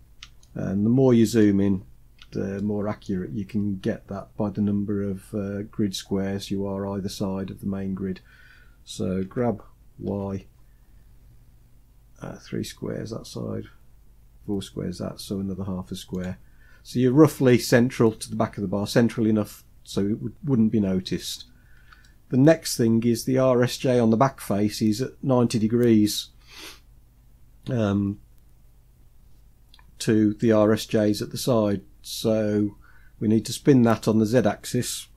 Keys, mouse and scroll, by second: 0.0-1.0 shift+middle drag, 1.2-1.8 scroll up 1, 1.8-2.2 scroll up 1, 2.2 shift+middle click, 8.8 g, 9.7 g, 16.4-19.0 scroll down 10, 19.0-21.2 middle drag, 21.2 scroll down 2, 21.6 shift+middle click, 22.8-24.2 scroll up 2, 31.5-32.1 scroll up 3, 32.6-33.1 scroll up 1.